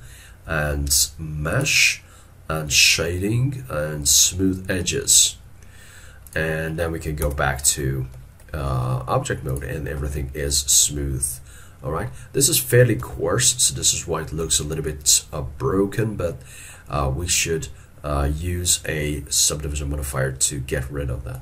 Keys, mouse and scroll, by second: 7.3 Tab, 7.8 middle click, 8.6 shift+middle click, 8.9 shift+middle click, 13.0 middle click, 13.1 alt+e, 13.8 middle click, 16.3 middle click.